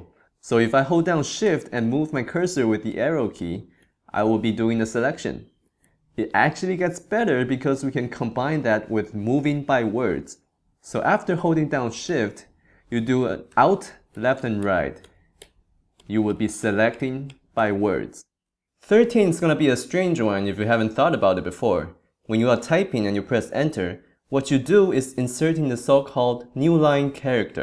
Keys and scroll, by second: 2.0 shift+Left, 5.0 shift+Right, 6.1 shift+Right, 6.2 shift+Left, 7.1 shift+Right, 14.1 alt+shift+Left, 16.0 alt+shift+Right.